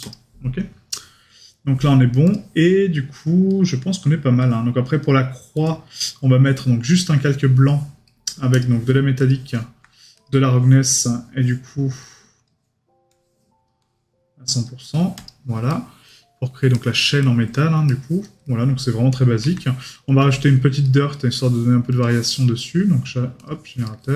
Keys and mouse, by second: 8.1 right click, 15.7 right click, 17.9 right click, 18.4 middle click, 20.8 right click, 22.6 right click, 23.9 right click.